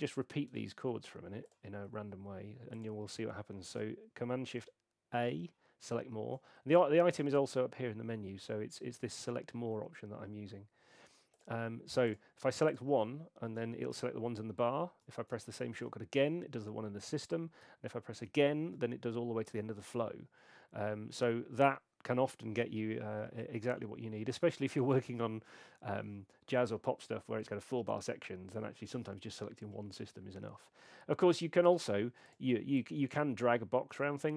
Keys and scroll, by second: 4.6 shift+super+a, 13.9 shift+super+a, 15.7 shift+super+a, 18.2 shift+super+a.